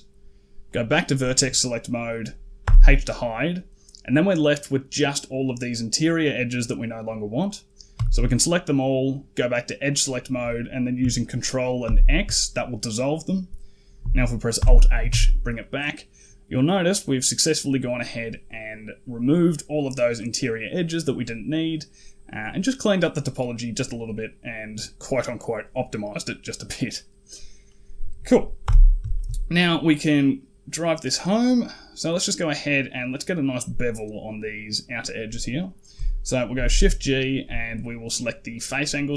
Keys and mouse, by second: 0.6 click, 2.5 h, 4.4 middle click, 6.1 middle click, 7.8 a, 9.7 click, 11.7 ctrl+x, 14.4 alt+h, 14.8 a, 14.9 a, 15.4 middle click, 19.6 middle click, 21.5 middle click, 23.4 middle click, 26.8 middle click, 28.5 n, 28.7 middle click, 29.0 shift+middle click, 29.9 middle click, 30.5 right click, 31.8 middle click, 36.4 shift+g.